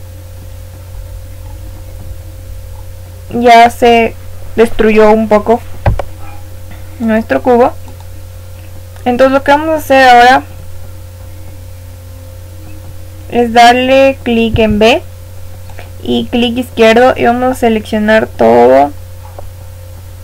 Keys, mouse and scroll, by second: 1.0-1.9 scroll down 1, 1.9-3.1 middle drag, 3.1 scroll down 1, 3.3-7.0 middle drag, 7.0 click, 14.5 b, 18.4-20.2 middle drag.